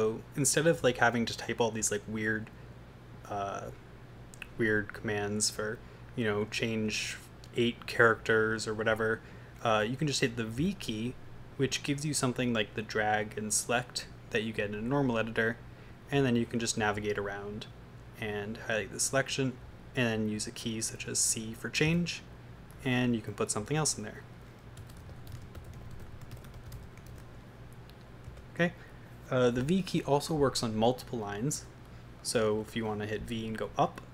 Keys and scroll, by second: 0.8 0, 10.6 v, 15.9 Right, 16.1 Right, 16.3 Right, 20.2 Right, 21.9 c, 23.3-27.6 typing, 28.3 Escape, 31.7 shift+Down, 33.8 Up.